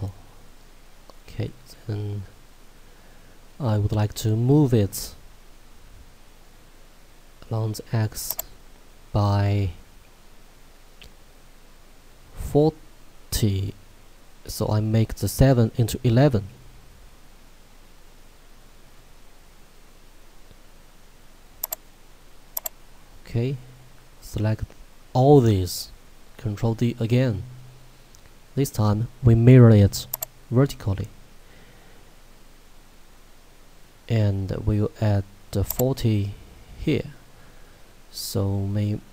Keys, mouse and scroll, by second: 1.4 click, 8.5 click, 21.7 click, 26.1 ctrl+Num_Lock, 26.7 ctrl+d, 30.1 click, 35.9 click.